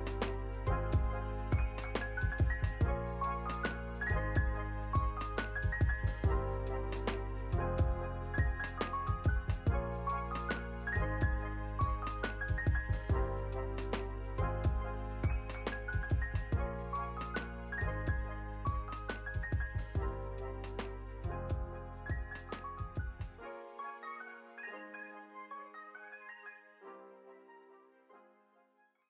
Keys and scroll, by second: 14.6 space.